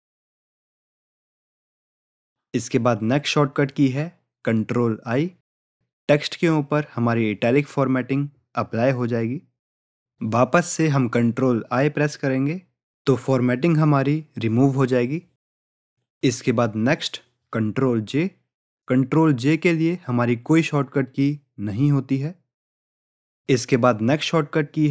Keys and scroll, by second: 7.3 ctrl+i, 8.4 ctrl+i, 11.7 ctrl+i.